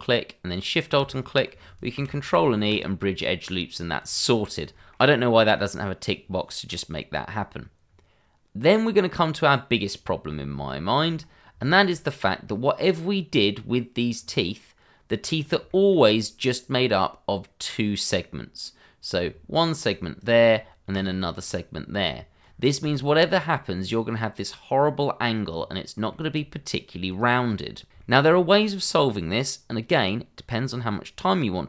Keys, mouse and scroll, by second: 0.0 click, 1.9 ctrl+e, 2.7 click, 3.1 scroll down 1, 3.4 middle click, 4.0 click, 4.3 scroll up 1, 4.8 shift+middle click, 6.3 middle click, 7.9-9.7 scroll down 1, 9.7 click, 10.2 scroll up 1, 10.7 shift+middle click, 11.1 scroll up 1, 11.6 shift+middle click, 14.2 scroll down 1, 15.3 scroll up 1, 15.7 shift+middle click, 16.1 scroll up 1, 19.3 Tab, 20.2 click, 20.9 shift+click, 22.0 Tab, 22.5 scroll down 1, 22.9 shift+middle click, 23.2 scroll up 1, 25.5 scroll down 1, 26.2 shift+middle click, 27.2 middle click, 27.4 shift+middle click, 28.2 scroll up 1, 28.5 shift+middle click.